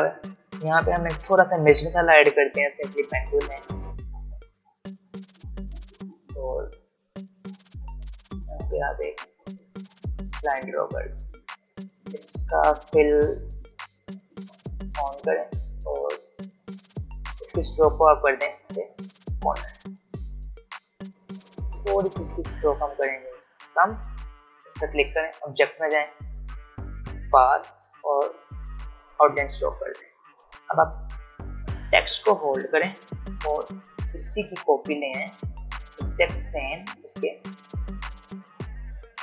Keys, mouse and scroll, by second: 2.8 p, 7.9 click, 10.1 shift+click, 11.1 v, 13.6 click, 15.5-16.1 scroll up 1, 17.7 click, 21.6-23.4 scroll down 1, 23.6 click, 30.2-30.5 alt+scroll down 1, 30.5 alt+scroll up 1, 31.6 click, 34.4-39.2 alt+drag.